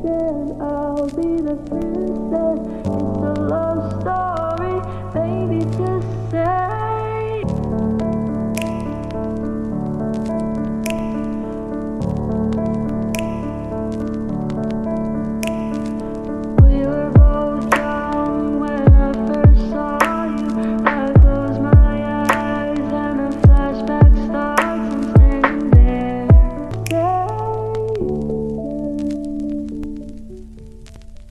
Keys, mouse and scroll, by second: 24.8 F9.